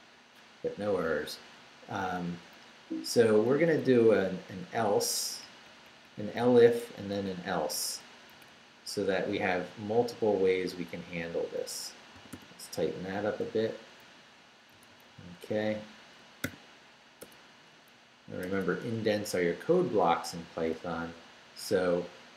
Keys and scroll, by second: 2.8 Up, 3.5 Down, 3.9 Up, 5.4 Up, 6.4 Right, 7.3 Up, 8.3 Down, 12.2 d, 14.7 Right, 16.4 o, 17.2 \, 18.4 BackSpace.